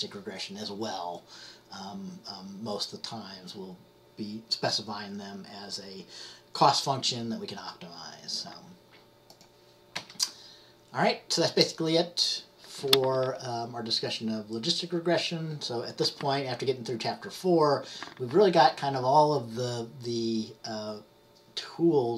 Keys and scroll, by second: 10.0 Up.